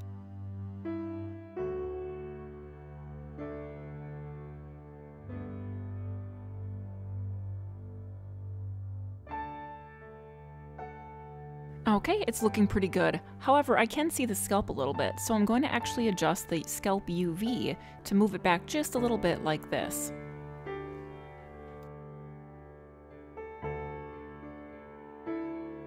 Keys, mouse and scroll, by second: 1.5 middle click, 2.5-3.2 scroll up 2, 3.3 middle click, 5.0 middle click, 11.7 middle click, 11.8-12.3 scroll up 3, 12.3 middle click, 13.1 shift+middle click, 13.7-14.1 scroll up 2, 14.2 middle click, 17.8 click, 18.6 click, 19.7 click, 21.2 middle click.